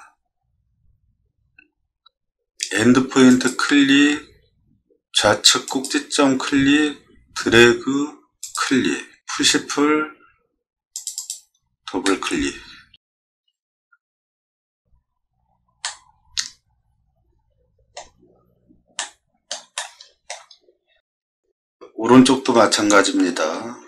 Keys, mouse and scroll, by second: 3.3 click, 9.3 p, 10.9 click, 11.1 click, 12.0-13.3 middle drag, 13.4 scroll down 2, 13.4 middle click, 15.8-17.9 shift+middle drag, 19.0 middle click, 19.7 shift+middle click, 21.4 middle click.